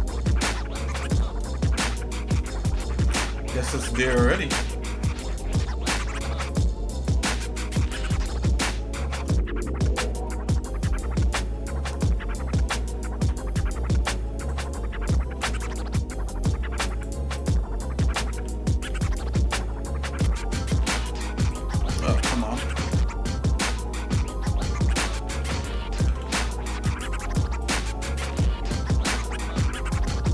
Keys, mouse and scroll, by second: 1.4 shift+middle click, 2.4 middle click, 2.5 click, 3.5 ctrl+Tab, 4.7 click, 4.7 middle click, 5.8 click, 6.5 shift+click, 7.5 shift+middle click, 8.7 shift+middle click, 9.3 middle click, 10.3 shift+middle click, 10.8 shift+middle click, 13.1 i, 15.5 ctrl+z, 16.9 shift+click, 17.4 shift+click, 18.9 e, 21.7 ctrl+z, 22.3 shift+click, 25.4 ctrl+z, 26.0 ctrl+z, 27.0 shift+click, 27.8 shift+click, 28.7 e.